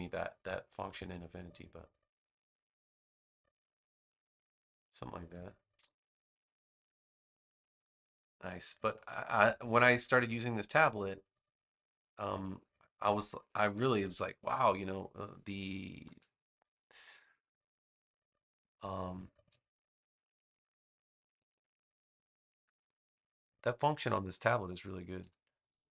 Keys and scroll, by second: 12.1 v, 14.4 BackSpace, 25.1 3, 25.4 Return.